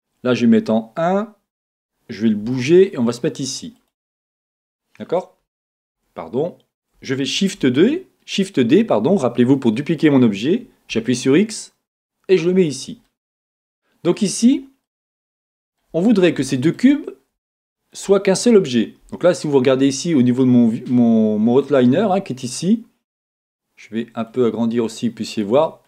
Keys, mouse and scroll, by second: 1.0 KP_1, 2.4 g, 3.9 click, 4.6-5.9 middle drag, 5.9 KP_1, 7.4 shift+d, 12.7 click, 13.2-14.8 middle drag, 14.5-14.8 scroll down 2, 15.0 middle click, 16.0 scroll up 1, 16.4-24.3 shift+middle drag, 17.0 scroll up 1, 24.3-25.8 drag.